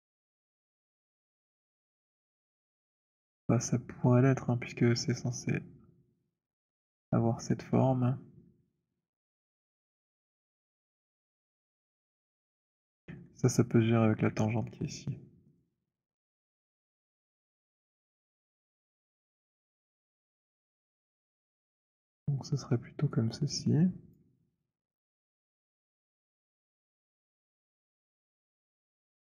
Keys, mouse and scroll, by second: 0.2 alt+middle click, 0.2 alt+middle click, 8.5 alt+middle click, 12.2 alt+click, 13.0 alt+middle click, 13.2 middle click, 14.5 alt+middle click, 15.4 click, 18.6 right click, 20.1 click, 24.1 click.